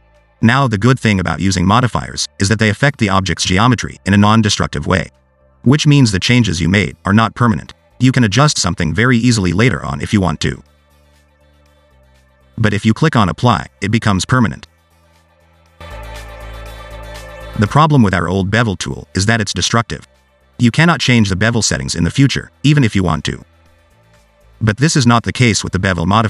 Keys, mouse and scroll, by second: 0.4 click, 11.5 Tab, 11.9 scroll down 1, 12.0 middle click, 13.8 click, 17.6 click, 18.7 click, 19.2 click, 20.3 click, 22.3 click, 23.9 click.